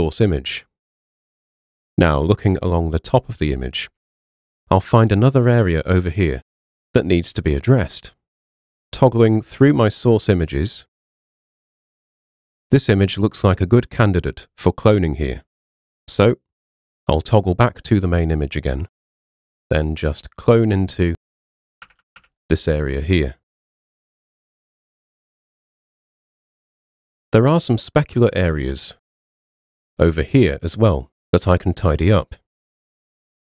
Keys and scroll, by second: 21.9 [.